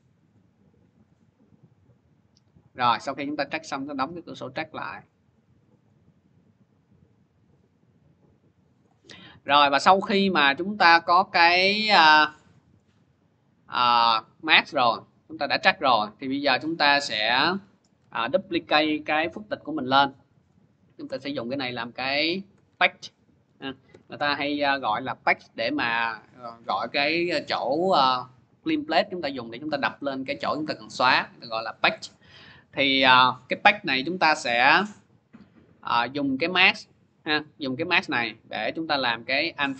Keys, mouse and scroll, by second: 0.1 click, 0.2 click, 2.8 click, 3.2 click, 4.9 click, 5.0 click, 5.4 click, 5.7 click, 8.7 click, 9.3 scroll, 10.3 scroll, 11.7 scroll, 11.9 click, 12.6 scroll, 13.9-14.5 scroll, 15.5 middle click, 16.4 middle click, 16.4 click, 17.3 click, 18.3 ctrl+d, 20.3 click, 20.9 Return, 22.2-24.2 typing, 32.1-34.7 drag, 34.7-36.5 middle drag, 34.7-36.3 scroll, 36.5 click, 37.0 click, 38.0 click, 38.8 click.